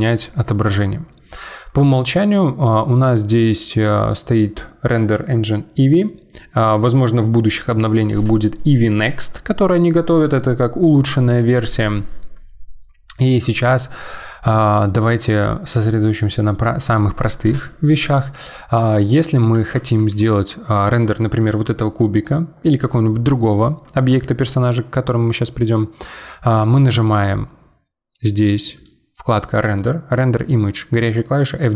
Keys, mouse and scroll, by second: 3.8 click, 13.1-16.3 middle drag, 19.1-19.9 middle drag, 19.9 g, 28.7 click.